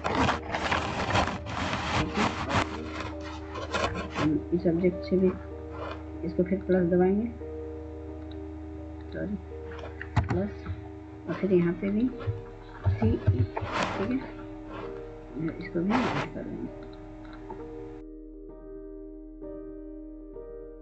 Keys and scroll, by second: 9.9 +, 12.6 typing, 14.0 typing.